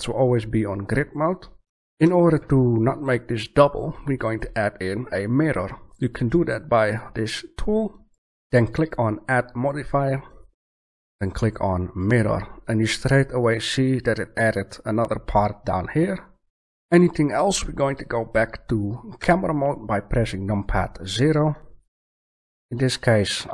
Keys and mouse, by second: 2.6-5.2 middle drag, 8.0 click, 9.5-11.4 drag, 19.1 KP_0.